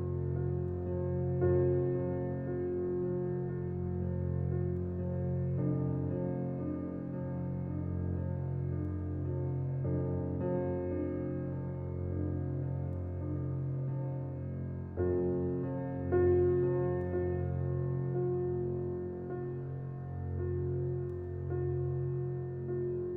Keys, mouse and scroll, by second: 0.4-4.6 drag, 12.3 scroll down 1, 14.8 click, 15.1 Escape, 15.7-16.5 scroll down 1, 16.8 alt+middle click, 18.5 click.